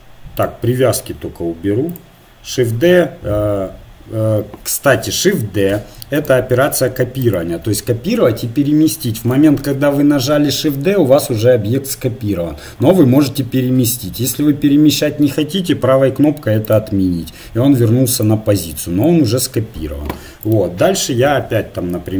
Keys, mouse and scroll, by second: 1.9-3.9 drag, 5.7 x, 7.3-9.0 right drag, 9.6 shift+d, 18.2-20.1 drag, 20.4-22.1 right drag, 20.6 Tab, 21.3 KP_1.